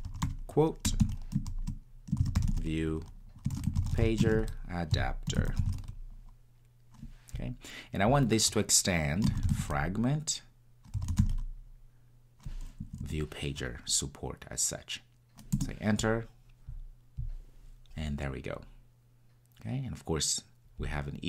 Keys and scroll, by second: 15.6 Return.